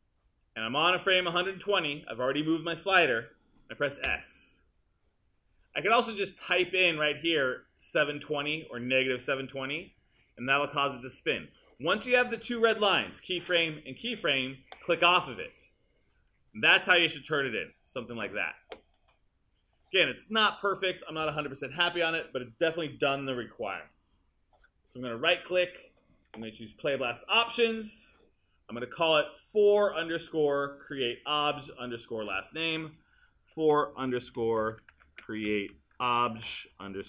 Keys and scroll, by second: 4.1 s, 33.5-37.0 typing.